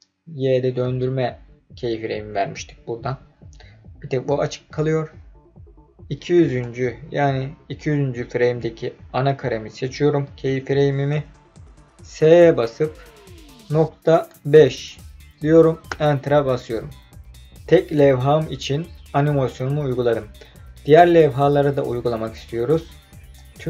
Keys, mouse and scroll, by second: 6.4 click, 12.2 s, 13.9 KP_Decimal, 14.3 KP_5, 15.9 KP_Enter, 22.7 click, 23.3-23.6 drag.